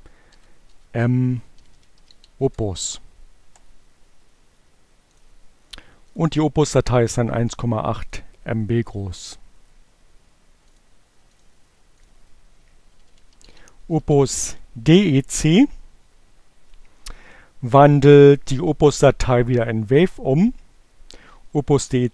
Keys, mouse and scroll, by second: 0.0-2.1 typing, 5.8 click, 7.0 click, 8.6 click, 10.0 click, 11.4 click, 12.4 click, 13.2 click, 13.3-15.4 typing, 20.1 space.